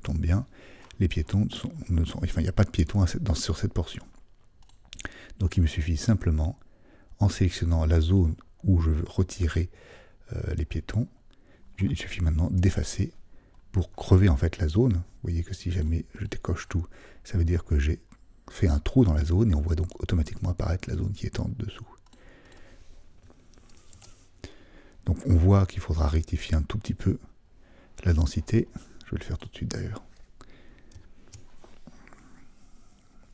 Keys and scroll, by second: 23.9 super+d.